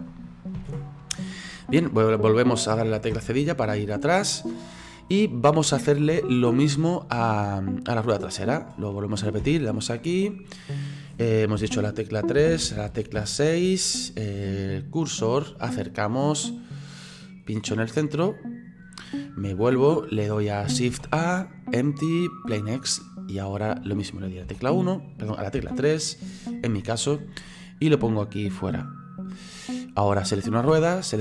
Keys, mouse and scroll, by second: 0.6 ctrl+z, 3.1 /, 3.8-4.4 middle drag, 4.4-5.0 scroll down 4, 5.0-6.8 middle drag, 6.8 scroll down 1, 7.0-7.8 scroll up 4, 7.8 right click, 9.4 /, 11.6-13.2 typing, 14.9 click, 15.5-16.1 scroll up 11, 16.6 scroll down 2, 18.4 click, 19.2-19.8 scroll down 12, 19.8-20.9 middle drag, 20.9 shift+a, 23.0-24.4 middle drag, 24.4 KP_1, 25.6 KP_3, 26.5-30.3 drag, 30.3 right click, 31.1 shift+right click.